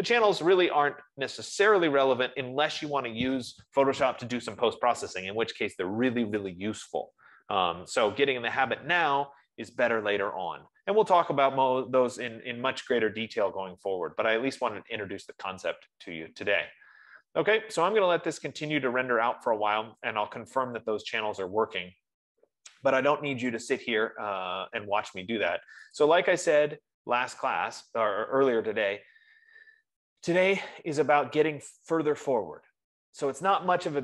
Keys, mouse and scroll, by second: 10.6 F15.